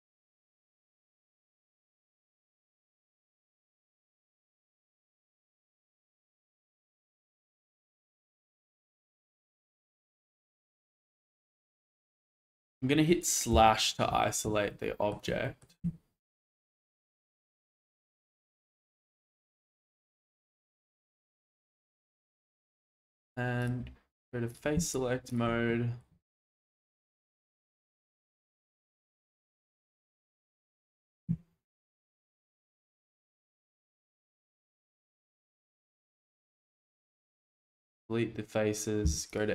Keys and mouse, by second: 1.3 middle click, 2.1-3.4 middle drag, 3.8 shift+middle click, 6.0-7.8 shift+middle drag, 8.7 middle click, 9.4 Tab, 9.9 middle click, 10.2-10.6 middle drag, 11.2 shift+middle click, 11.9 alt+z, 13.5 /, 14.2 shift+middle drag, 14.7-15.1 middle drag, 15.4 shift+middle drag, 15.8 Tab, 16.7 shift+middle click, 22.0 shift+middle click, 25.3 shift+click, 25.7 middle click, 26.2 shift+middle click, 26.8-28.0 drag, 28.2 shift+click, 28.8 middle click, 29.9 middle click, 31.2 Delete, 33.8 shift+middle click, 34.1 middle click, 36.3 shift+middle click, 39.0 2.